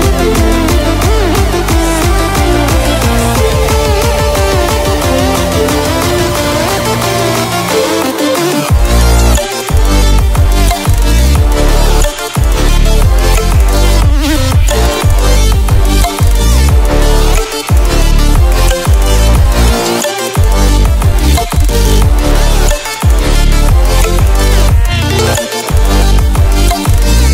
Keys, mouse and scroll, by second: 3.4-5.2 ctrl+alt+scroll up 2, 5.3-6.0 click, 10.3 ctrl+alt+scroll down 1, 12.5-13.7 drag, 17.2-17.8 drag.